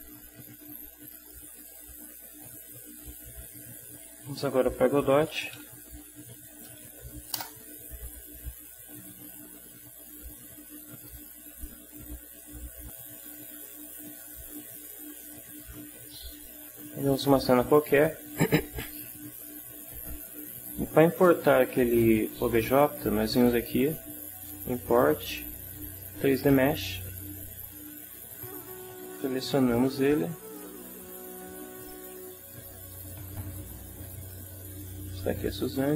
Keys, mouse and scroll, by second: 1.2 click, 4.9-6.1 typing, 6.4 Down, 7.4 Return, 11.0 click, 23.8 click, 27.0 click, 28.4 click, 30.5 click, 32.8 click, 34.8 click.